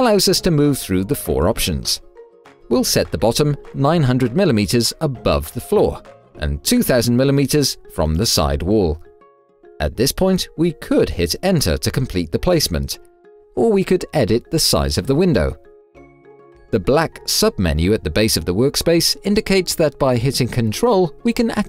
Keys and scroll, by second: 2.5 Tab.